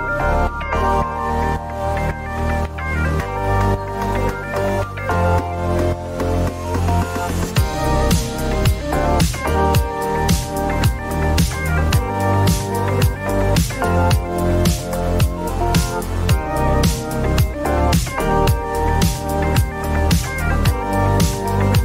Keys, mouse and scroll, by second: 3.8 click, 6.1 click, 9.0-10.7 typing, 10.8 Return, 13.4 click, 14.2-14.5 typing, 14.8 click, 15.4 Return, 15.7 typing, 16.8 click, 17.6-18.5 typing, 17.8 click, 19.2 click, 19.5 Return, 20.1 typing.